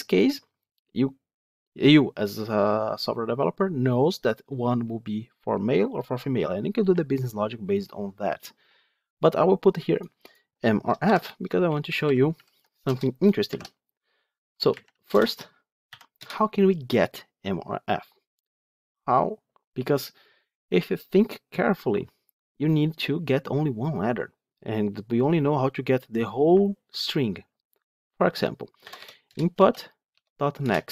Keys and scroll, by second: 29.2 Return.